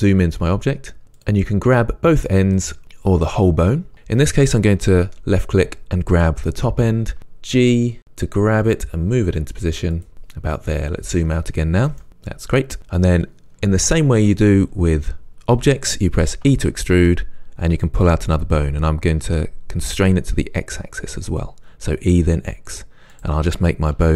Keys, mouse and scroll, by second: 1.2 click, 2.2 click, 2.6 click, 7.2 g, 10.1 click, 10.9-12.0 scroll down 1, 12.0-17.5 shift+middle drag, 16.5 e, 23.1 middle click, 23.3 click, 24.0 e.